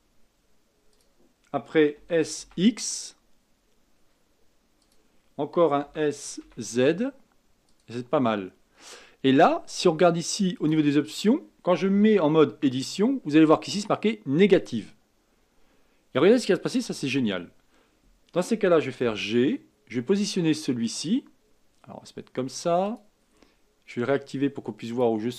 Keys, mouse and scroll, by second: 1.9 s, 5.8 s, 10.5 click, 12.5 Tab, 14.5 click, 15.3-16.8 scroll down 2, 16.8 KP_7, 19.0 g, 24.9 click.